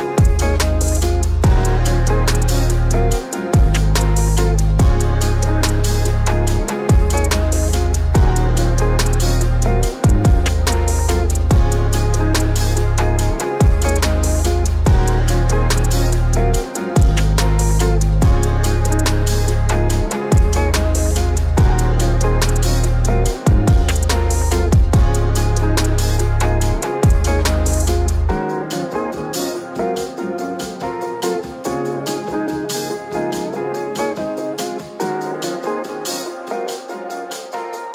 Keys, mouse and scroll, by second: 7.1-8.1 typing, 9.5 click, 9.5-11.6 typing, 12.0 click, 13.3-14.8 scroll down 1, 14.9 click, 16.4-22.1 typing, 18.5 click, 21.4-26.7 drag, 23.5-24.2 typing, 27.3 ctrl+space, 27.4-28.4 typing, 28.6 click, 30.2-30.8 scroll up 1, 32.3 click, 34.3 scroll down 1, 35.4 click, 36.4 space.